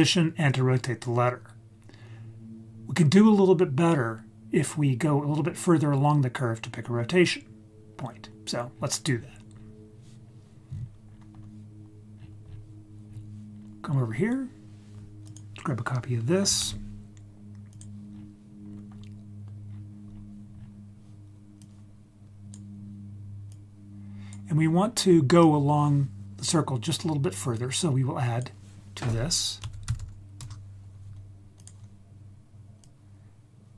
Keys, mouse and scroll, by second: 8.7-10.8 scroll down 7, 10.8-12.1 scroll up 5, 12.1-12.6 scroll down 4, 13.0-13.8 scroll down 2, 13.5-15.2 scroll up 4, 15.2 click, 16.6 shift+d, 17.7 click, 18.1 scroll down 2, 18.6-19.7 scroll up 5, 19.7-21.1 scroll down 5, 21.5 click, 23.5 click, 24.2 click, 24.5-26.5 scroll up 7, 27.5-30.4 drag, 30.0 d, 31.5 click, 32.8-33.7 drag.